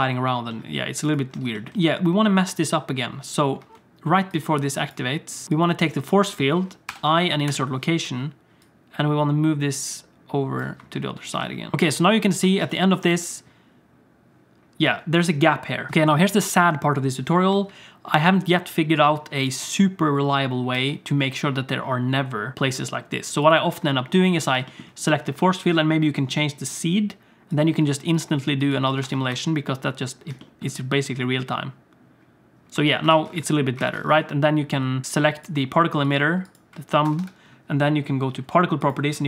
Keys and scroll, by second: 1.7 space, 3.6 space, 5.4 g, 6.8 i, 11.3 g, 11.7 space, 12.4 alt+shift+z, 14.8 space, 15.9 space, 17.5 space, 20.7 space, 28.9 Tab, 29.0 Tab, 29.3 space, 32.7 space, 33.1 alt+shift+z, 33.8 alt+shift+z, 37.0 Tab, 37.2 Tab.